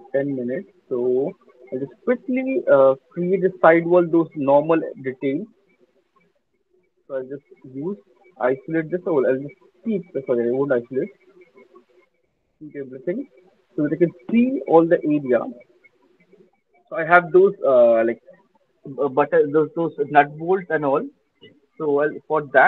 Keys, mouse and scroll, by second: 0.0 alt+middle click, 1.1 alt+click, 1.3 alt+right click, 1.5 alt+click, 2.0 alt+middle click, 2.1 alt+right click, 3.5 click, 5.3 click, 6.5 click, 6.7 alt+click, 7.6 click, 8.6 alt+middle click, 9.0 alt+click, 9.2 alt+click, 10.2 click, 11.9 click, 12.3 click, 13.1 alt+click, 13.4 alt+middle click, 13.9 alt+click, 14.4 alt+middle click, 15.0 alt+middle click, 15.4 alt+middle click, 16.2 alt+click, 17.9 alt+right click, 22.4-22.6 scroll.